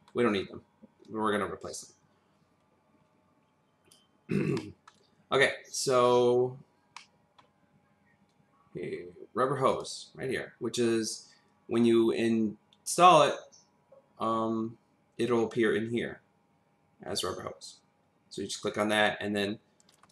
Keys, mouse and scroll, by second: 4.6 middle click, 6.9 middle click, 7.6 scroll, 7.6-8.7 scroll down 1, 9.7 click, 13.1 click.